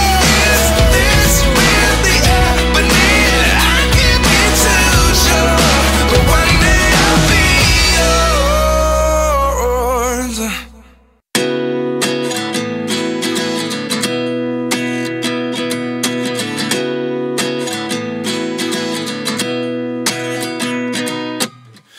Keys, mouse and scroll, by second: 0.2 right click, 6.4-7.1 scroll down 1, 7.7 scroll down 1, 8.9-9.6 scroll down 1, 10.3-11.0 scroll down 1, 12.3 ctrl+z, 12.9 space, 13.8 double click, 14.2 double click, 14.3 ctrl+click, 14.7 double click, 14.8 ctrl+click, 16.1 alt+scroll down 1, 18.4 alt+scroll down 1, 18.6 ctrl+Return.